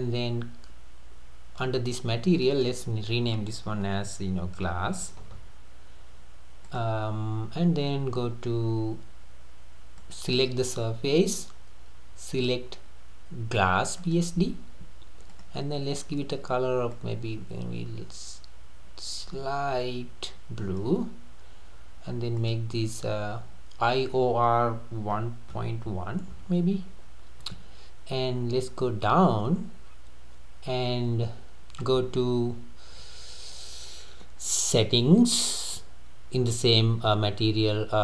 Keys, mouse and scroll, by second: 2.4 click, 2.6-5.4 drag, 5.4 s, 10.0-13.2 drag, 15.3 click, 22.4-25.5 drag, 28.2-30.6 scroll down 11, 31.3-32.0 scroll down 1.